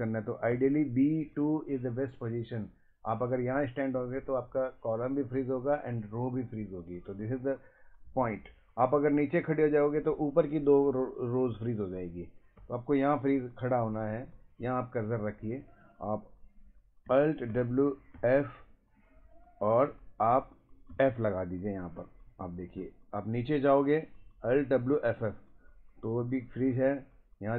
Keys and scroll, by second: 0.5 Right, 9.2 Down, 12.6 Up, 17.5 w, 18.2 f, 20.9 f, 22.0 Down, 22.4 Up, 22.8 Down, 24.7 Up, 26.2 Down, 26.4 Right.